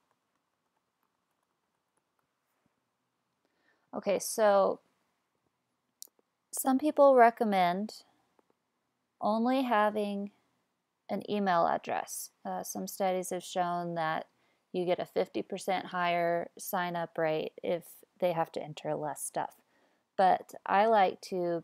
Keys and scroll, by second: 0.0-2.8 typing.